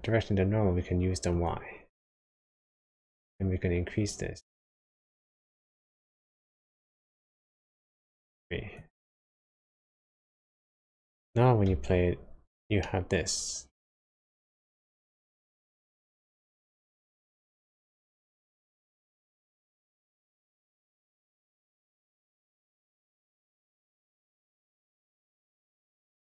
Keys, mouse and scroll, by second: 3.3 click, 11.7 space, 12.9 middle click, 16.3-16.8 scroll down 3, 16.8 middle click, 20.6-21.7 scroll up 2, 21.7 middle click, 23.1 space, 24.2 middle click.